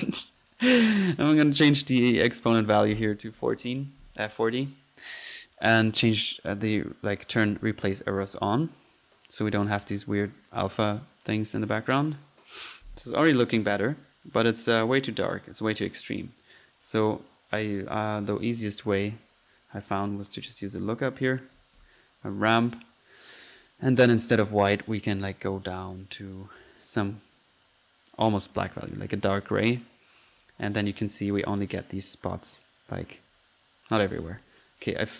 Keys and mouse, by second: 0.4 click, 1.6 click, 7.6 click, 10.2 click, 11.3 click, 12.9 click, 13.2 F1, 15.0 Escape, 15.8 click, 16.4 right click, 16.8 click, 17.0 click, 17.3 right drag, 17.9 click, 18.8-19.5 typing, 20.5 drag, 21.2 right click, 21.3 right click, 21.8 typing, 22.5 drag, 22.8 click, 23.2 click, 23.8 click, 24.3-24.7 drag, 25.2-29.8 drag, 30.2 drag, 30.3 F1, 30.5-31.3 drag, 33.2 Escape.